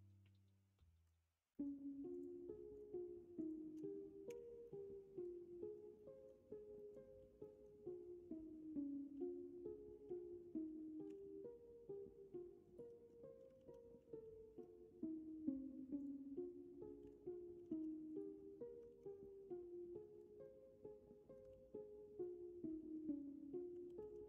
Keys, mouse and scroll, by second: 1.5 middle click, 4.2 f, 4.6 middle click, 5.9 middle click, 6.8 middle click, 7.5 middle click, 11.0 k, 13.5 alt+z, 17.0 k, 18.8 alt+z, 19.2 middle click, 20.4-21.7 middle drag, 21.5 alt+z, 22.2 middle click, 23.8 ctrl+z.